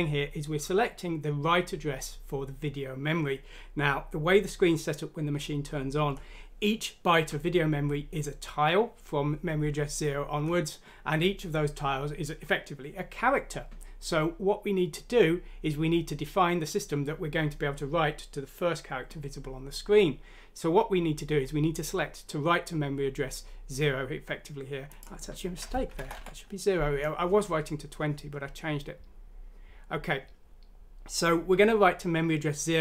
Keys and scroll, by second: 25.9 BackSpace, 26.2 0, 27.6 typing.